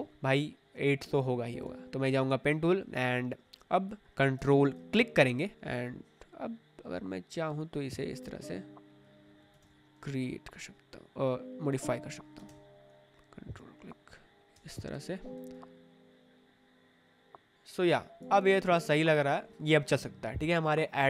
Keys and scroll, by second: 9.5 ctrl+z, 12.3 ctrl+z, 14.5 v, 17.5 v, 18.4 space.